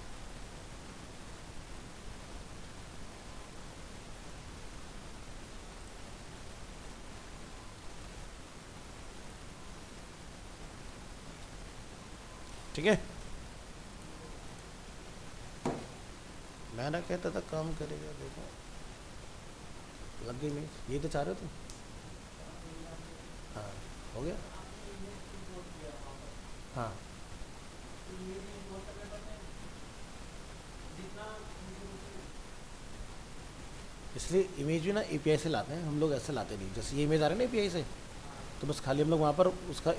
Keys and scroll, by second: 4.7 ctrl+c, 10.3 ctrl+v, 11.8 ctrl+s.